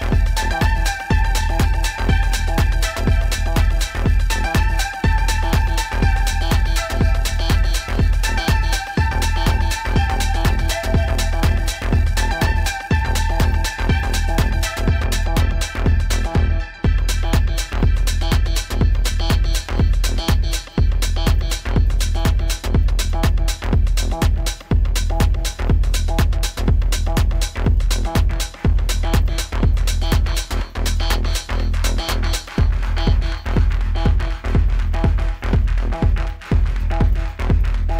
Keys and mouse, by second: 0.6 alt+click, 1.5 click, 2.0 click, 5.0 p, 7.1 click, 8.3 e, 9.7-12.5 drag, 14.1-15.0 alt+drag, 16.9 click, 17.5 alt+click, 18.9-22.5 drag, 23.5 click, 24.1 alt+click, 27.2 click, 27.8 click, 28.5-29.6 drag, 29.8-32.2 alt+drag, 33.6-37.3 drag, 37.5-37.9 alt+drag.